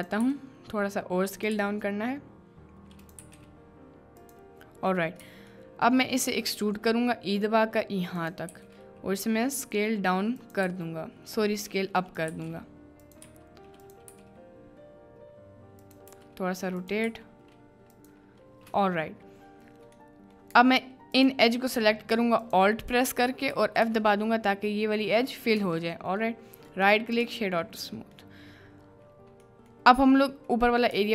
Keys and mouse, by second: 25.6 b, 26.8 right click, 30.9 b.